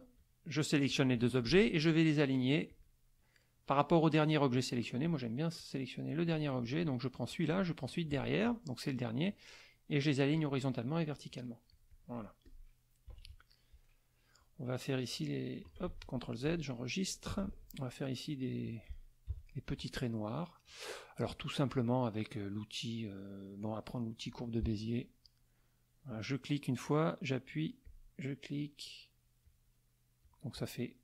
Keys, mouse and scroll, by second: 0.9 shift+click, 2.7 click, 5.0 click, 5.5 click, 6.6 click, 7.3 shift+click, 7.8 shift+click, 10.3 click, 11.3 click, 11.7 click, 12.5 click, 13.1 KP_Subtract, 13.8 middle click, 15.0 click, 15.9 ctrl+z, 17.3 ctrl+s, 19.3 KP_Subtract, 20.0 middle click, 24.2 click, 26.1 click, 27.8 click, 29.4 click, 30.2 click.